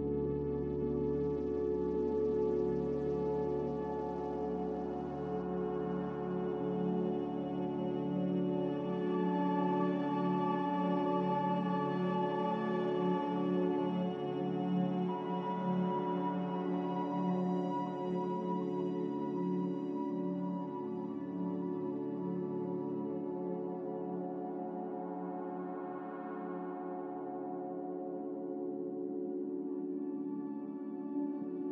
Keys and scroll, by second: 6.0-6.8 typing, 11.0-11.4 typing, 13.1 BackSpace, 19.3 8, 25.8 a.